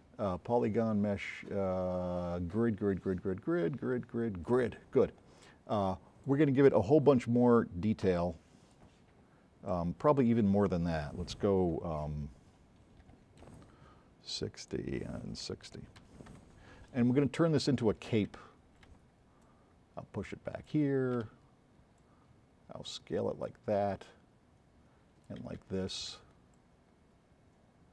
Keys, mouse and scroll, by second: 4.5 click, 8.2 click, 9.7 click, 13.2 KP_6, 13.5 KP_0, 15.7 KP_6, 16.2 KP_0, 16.5 KP_Enter, 18.4 c, 19.0 v, 19.4-20.7 drag, 20.8 c, 21.4 x, 22.0-23.1 drag, 25.6 c, 26.2 v, 26.6-27.6 drag.